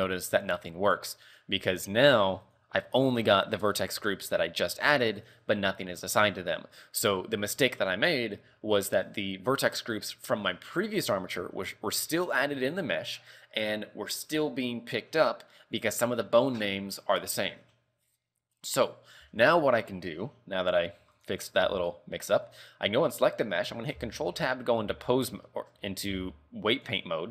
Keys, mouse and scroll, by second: 1.3 right click, 2.6 click, 3.1 scroll down 5, 3.4-4.6 scroll up 15, 4.9 scroll down 2, 21.3 right click, 22.0 right click, 22.6 right click, 24.2 ctrl+Tab, 24.4-24.7 scroll up 4, 25.3 scroll down 2, 25.6 shift+middle click, 26.0 scroll up 2, 26.2 a, 27.0 click.